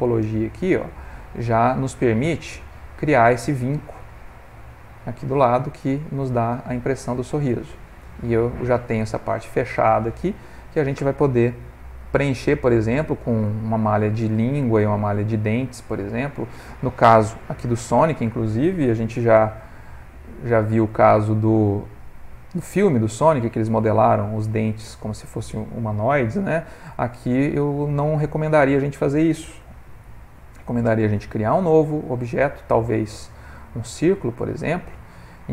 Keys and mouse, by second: 2.8 ctrl+middle click, 4.2 Tab, 4.9 middle click, 14.1 middle click, 19.0 alt+b, 20.1 middle click, 20.8 ctrl+middle click, 21.0 ctrl+middle click, 21.2 middle click, 21.9 middle click, 23.2 middle click, 26.4 middle click, 26.8 middle click, 27.6 middle click, 30.2 shift+a, 33.7 ctrl+middle click.